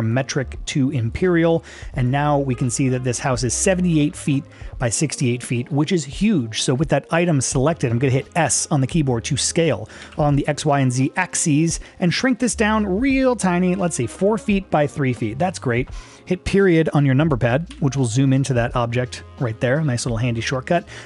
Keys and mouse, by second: 0.2-1.2 drag, 5.1-6.0 middle drag, 7.6 click, 10.1 s, 17.8 KP_Decimal, 19.2-19.5 middle drag, 19.8 shift+middle drag, 20.1 middle drag, 20.7 middle click.